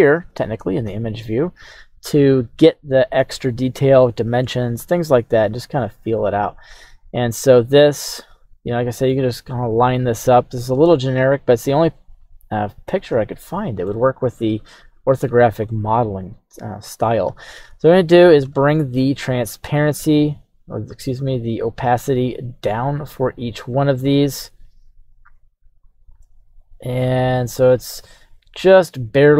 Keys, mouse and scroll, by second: 2.3 scroll up 2, 2.9-4.7 scroll down 1, 6.8-9.1 middle drag, 9.9 middle click, 12.2 KP_3, 13.3 shift+middle click, 14.1-15.3 scroll up 2, 15.7-17.0 shift+middle drag, 17.7-18.5 scroll up 1, 20.5 click, 21.3-23.0 drag, 23.3 right click, 25.4 click, 25.8-29.3 drag.